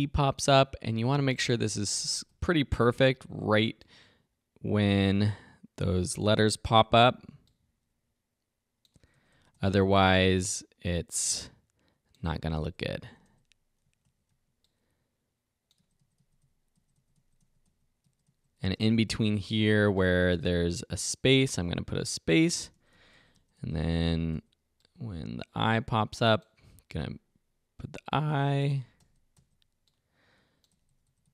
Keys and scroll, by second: 1.5 Right, 6.3 Right, 8.9 Right, 12.2 Right, 13.0 Right, 13.8 Left, 14.3 Right, 15.8 Right, 18.6 Left, 22.5 Right, 27.8 Right, 30.7 Right.